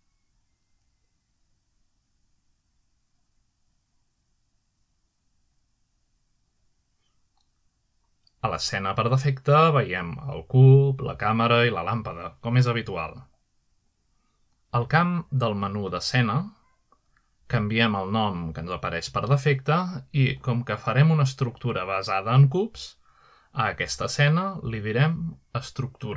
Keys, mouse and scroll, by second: 2.1 click, 4.2-8.6 typing, 11.4 click, 12.4 click, 13.7 shift+middle drag, 14.5 middle click, 18.5 click, 20.6-22.6 typing, 23.5 Return.